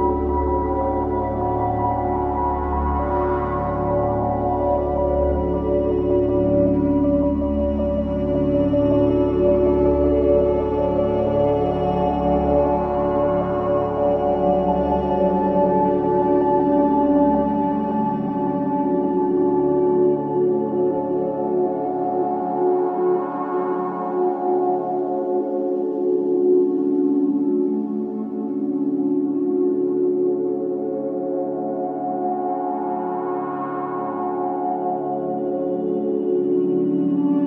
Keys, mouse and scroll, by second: 1.3-1.7 scroll down 1, 3.0 click, 6.2-6.6 scroll down 1, 7.6-18.2 drag, 18.5-19.0 scroll down 1, 20.0-20.4 scroll up 1, 20.5-22.4 drag, 22.4 ctrl+z, 23.8-24.9 scroll down 1, 24.7-26.0 typing, 26.3 Return, 27.0 scroll up 1, 27.6-35.4 drag, 35.2-36.4 typing.